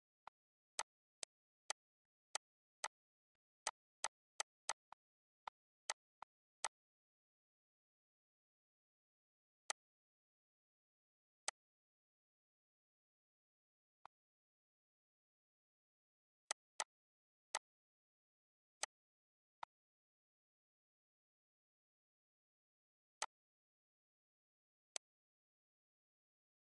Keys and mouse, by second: 1.3 shift+click, 2.1 shift+click, 4.3 shift+click, 4.6 shift+click, 6.2 ctrl+x, 8.0 click, 9.5 click, 10.1 click, 13.0 click, 16.1 click, 17.4 click, 18.7 click, 19.4 click, 23.0 click, 24.7 click, 25.7 ctrl+s.